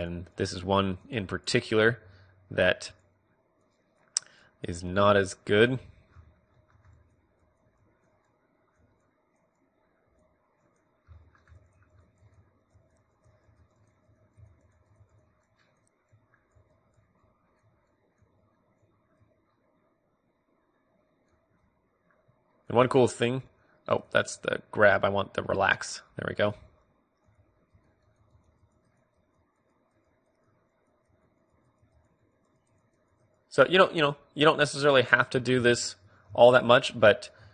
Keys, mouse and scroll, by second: 0.0-4.6 drag, 4.6 g, 5.0-21.1 drag, 5.0 right click, 7.1-8.4 middle drag, 11.7-13.0 middle drag, 21.7-37.5 drag.